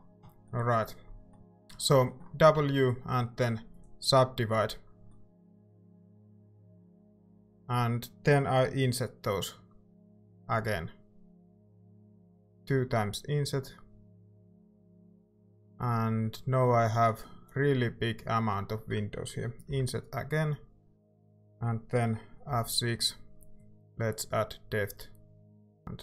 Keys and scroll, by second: 2.6 w, 10.4 i, 11.5 i, 19.7 i, 22.5 F6, 25.8 Tab.